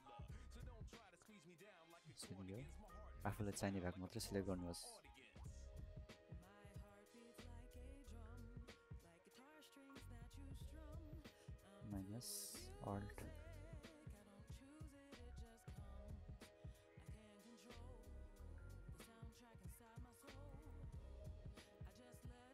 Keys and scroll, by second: 3.0 space, 9.7 typing, 11.6 typing, 15.5 alt+[, 20.1 ctrl+alt+space, 22.3 typing.